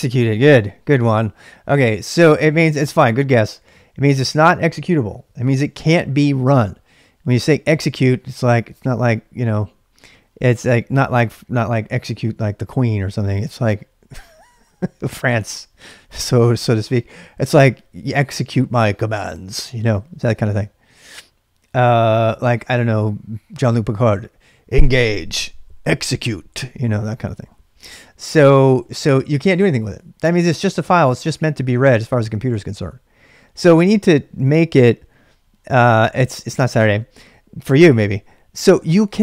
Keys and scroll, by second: 29.0-29.9 typing.